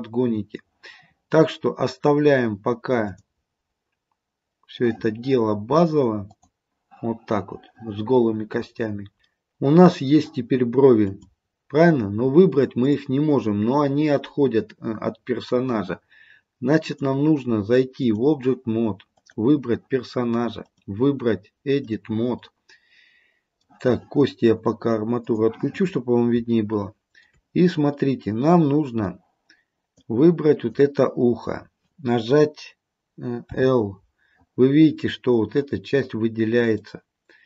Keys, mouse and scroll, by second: 3.1 click, 6.3 click, 8.9 scroll down 1, 9.2 click, 9.5 middle click, 11.2 click, 12.9 click, 14.3 middle click, 16.9 click, 19.3 click, 20.7 click, 22.6 middle click, 25.4 click, 26.0-26.6 scroll up 2, 26.6 shift+middle click, 28.1 middle click, 30.1 click, 33.7 l, 35.0 middle click.